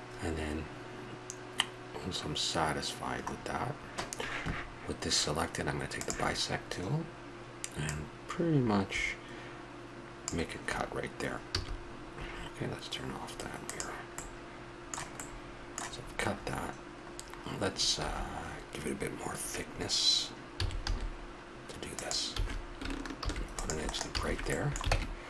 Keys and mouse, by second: 3.4-5.9 middle drag, 5.9-7.9 drag, 11.5 a, 13.6 click, 14.1-17.1 middle drag, 18.0 a, 20.5 s, 22.4 a, 23.2 ctrl+r, 24.1 a, 24.9 ctrl+Tab.